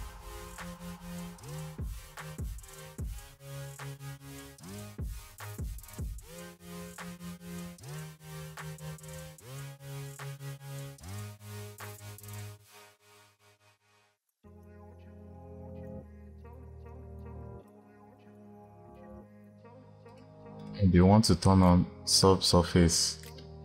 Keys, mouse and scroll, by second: 1.2 click, 2.2 click, 2.9 click, 4.1 click, 4.3 click, 4.9 click, 5.2 middle click, 5.5 click, 6.4-7.5 drag, 7.9-9.0 drag, 12.1 click, 12.6 g, 13.2 click, 13.9 scroll down 4, 14.2 click, 15.3 g, 15.9-16.4 scroll up 6, 16.5-16.8 scroll down 4, 16.8 click, 17.3 click, 17.7 scroll up 4, 18.1 click, 19.1-20.5 drag.